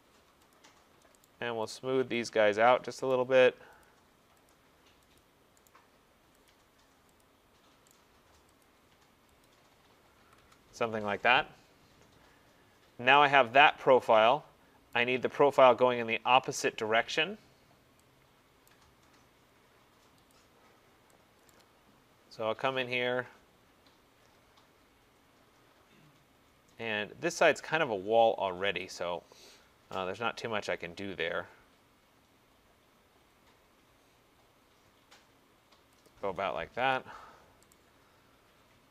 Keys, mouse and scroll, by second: 0.6 click, 1.3 right click, 1.8 click, 2.4 click, 3.2 right click, 3.9 click, 4.5 click, 5.2 click, 5.7 right click, 6.5 click, 7.2 click, 7.9 right click, 8.7 click, 9.5 click, 10.3 Escape, 10.5 Escape, 15.0 right click, 18.7 right click, 20.4 click, 21.6 right click, 21.9 middle click, 21.9 middle click, 23.7 middle click, 26.1 middle click, 26.5 middle click, 26.6 middle click, 29.0 click, 32.6 click, 36.1 click, 36.8 Return, 37.8 right click.